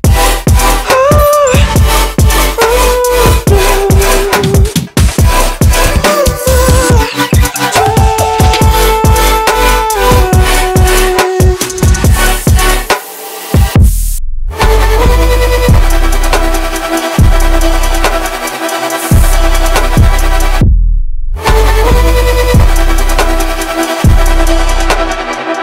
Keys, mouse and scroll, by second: 0.1-1.0 scroll down 4, 1.2-3.4 drag, 3.4-4.3 scroll up 4, 4.3 click, 5.8 click, 6.1 scroll down 2, 6.4 alt+middle click, 6.7-7.7 alt+drag, 7.7-8.6 scroll up 1, 8.6 alt+middle click, 8.9-10.4 alt+drag, 11.1 drag, 12.1 click, 15.1-17.5 alt+drag, 17.5-17.9 scroll up 2, 17.9-18.4 alt+drag, 18.4-20.6 alt+middle drag, 20.6-22.1 drag, 22.4-23.6 alt+drag, 23.6 scroll down 1, 23.8 alt+middle click, 24.2-25.6 alt+drag.